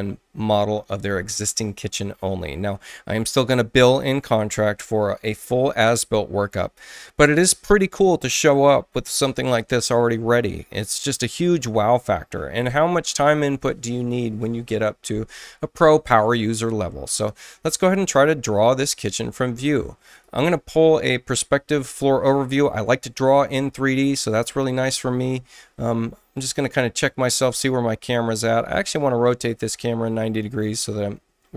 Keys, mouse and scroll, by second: 20.0 click, 26.3 click, 29.6 click.